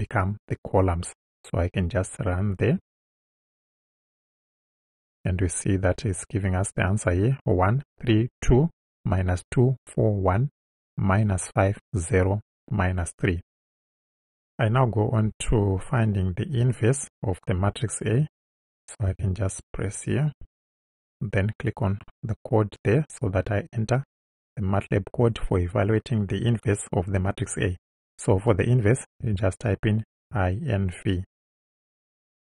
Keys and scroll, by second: 19.1 Return, 29.2 i, 30.2 n, 31.8 v.